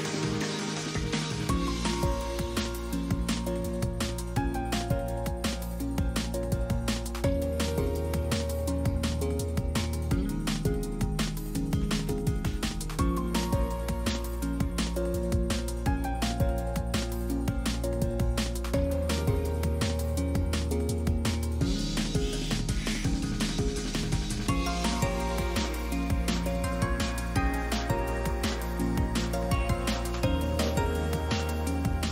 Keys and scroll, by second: 0.0 F4, 1.3 F4, 5.1 z, 8.6 F4, 9.8 F4, 18.5 a, 18.9 Caps_Lock, 18.9 BackSpace, 19.1 d, 19.5 Return, 19.9 ctrl+c, 20.9 o, 23.8 F4, 29.1 Delete, 31.1 F4.